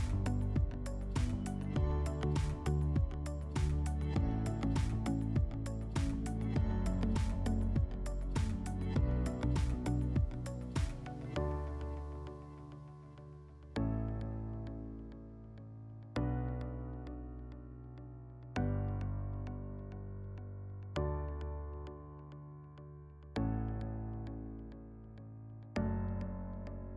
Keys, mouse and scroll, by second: 0.1 click, 0.5 ctrl+click, 0.7 alt+middle click, 0.9 middle click, 1.4 ctrl+click, 2.0 click, 2.2 click, 2.5 click, 2.6 click, 2.7 middle click, 3.1 click, 3.2 click, 3.4 middle click, 3.7 click, 3.9 scroll, 4.1 right click, 4.5 click, 4.7 click, 4.8 click, 5.0 click, 5.5 click, 5.6 click, 6.2 alt+middle click, 6.3 ctrl+click, 7.0 alt+middle click, 7.5 ctrl+click, 7.6 ctrl+click, 8.2 alt+middle click, 8.4 ctrl+click, 9.1 alt+middle click, 9.6 click, 9.8 click, 9.9 click, 10.1 click, 10.1 click, 10.2 3, 10.4 click, 10.6 click, 11.1 click, 11.4 click, 11.5 click, 11.6 click, 11.6 click, 11.7 3, 11.9 click, 12.2 click, 12.8 middle click, 12.9 middle click, 13.0 click, 13.0 click, 13.2 -, 13.4 click, 13.6 click, 13.8 click, 14.2 ctrl+click, 14.7 alt+middle click, 15.0 ctrl+click, 15.7 click, 16.3 click, 16.4 click, 16.6 click, 16.9 click, 17.3 alt+middle click, 17.4 middle click, 17.6 click, 18.5 F4, 21.8 F4, 23.1 click, 24.1 scroll, 25.9 click, 26.7 right click.